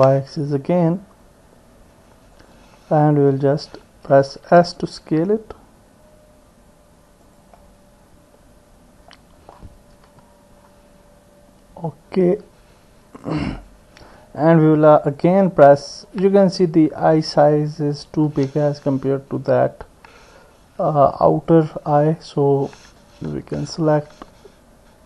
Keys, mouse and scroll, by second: 2.8 click, 3.6 middle click, 4.5 s, 7.6-9.1 drag, 10.1 KP_1, 13.6-15.2 drag, 21.4 alt+shift+click.